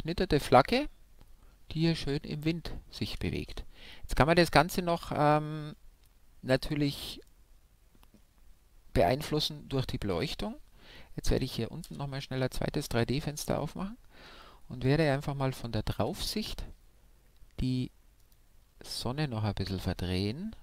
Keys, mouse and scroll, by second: 3.4 shift+space, 5.2-6.7 scroll down 1, 6.7-7.6 scroll down 1, 7.6-9.4 middle drag, 11.8 shift+F5, 13.1-15.4 middle drag, 15.4 KP_7, 15.9 KP_5, 18.2-20.6 right drag.